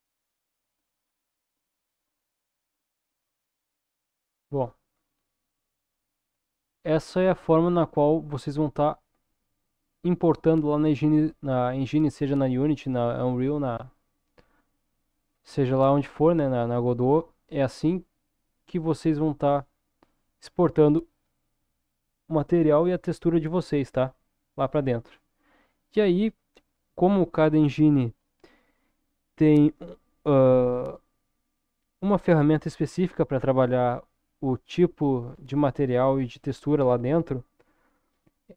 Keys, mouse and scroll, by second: 1.1-2.4 drag, 3.2-4.6 middle drag, 4.9-5.5 scroll up 1, 5.5-6.7 middle drag, 15.2-18.8 scroll down 3, 19.1-19.4 scroll up 2, 19.9-20.5 scroll up 1.